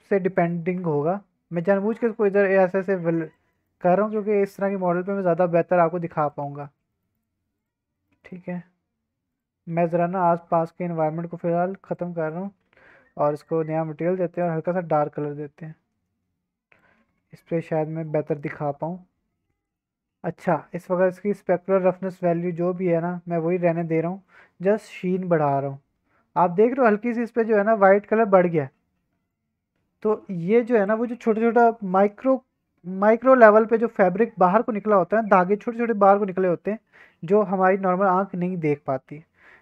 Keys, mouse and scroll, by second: 0.3 click, 0.6 shift+middle click, 1.6 click, 1.8-2.4 scroll down 1, 2.4 click, 2.8 g, 3.2 click, 3.4 scroll down 2, 3.5 click, 3.5 middle click, 3.8 Tab, 4.0 click, 4.2 scroll up 2, 4.5 middle drag, 4.9 shift+middle drag, 5.1 scroll up 1, 5.4 middle drag, 5.7-6.1 scroll up 1, 6.1-6.4 middle drag, 6.3 z, 6.6 shift+middle drag, 6.9 middle click, 7.1-7.6 right drag, 7.9 shift+middle click, 8.2 middle click, 9.3 click, 9.9-12.5 drag, 13.4 click, 14.3 click, 17.0 alt+a, 17.8 middle click, 18.0 scroll down 1, 18.4 middle click, 18.7 scroll up 2, 19.3 scroll down 2, 19.5 middle click, 19.8-20.2 scroll up 2, 20.2 middle click, 20.4-21.5 scroll down 3, 22.5-23.8 drag, 24.1 middle click, 24.3 scroll up 1, 25.1-26.9 drag, 29.3-30.8 drag.